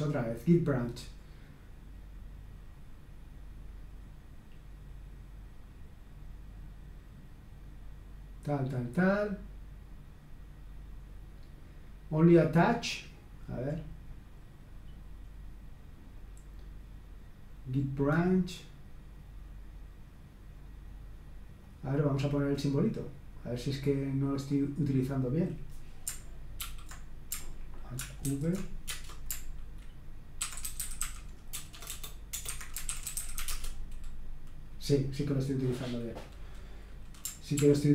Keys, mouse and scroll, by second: 3.9-7.7 scroll down 1, 7.7-9.0 scroll down 1, 9.0-10.0 scroll down 1, 13.9-14.6 scroll down 1, 14.6-15.3 scroll down 1, 15.3-16.4 scroll down 1, 21.6 click, 23.6 click, 24.5 click, 25.3 click, 26.6 shift+i, 28.3 ctrl+alt+v, 28.9 Return, 30.2-33.9 typing, 32.4 Escape, 37.6 ctrl+p.